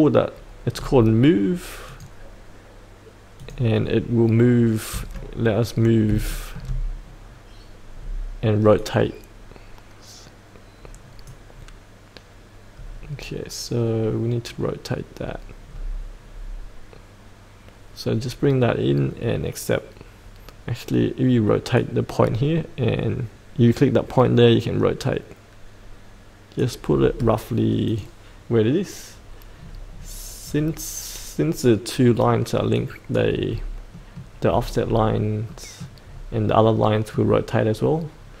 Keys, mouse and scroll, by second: 0.8-1.9 scroll down 1, 1.9 click, 4.4-5.8 scroll down 1, 5.8 scroll up 1, 6.3 shift+middle click, 6.9-8.7 scroll down 1, 8.7-10.3 drag, 10.3-11.3 drag, 13.0-13.5 scroll down 1, 21.8-26.6 drag, 30.4-32.7 scroll up 1, 32.7 click, 33.4-34.0 scroll up 1, 34.0 middle click, 34.4-35.5 scroll down 1, 35.5 middle click, 36.1-36.8 scroll up 1, 36.8 middle click, 37.4-38.4 scroll up 1.